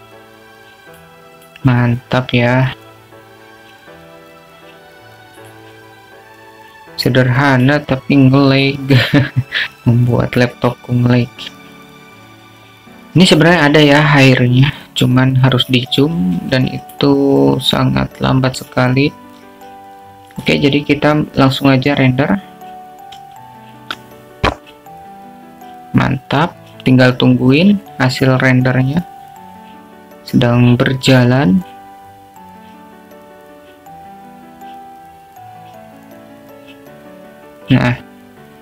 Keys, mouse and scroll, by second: 1.1 click, 1.8 click, 3.0 click, 6.0 click, 7.5 click, 9.7-10.9 drag, 18.5 q.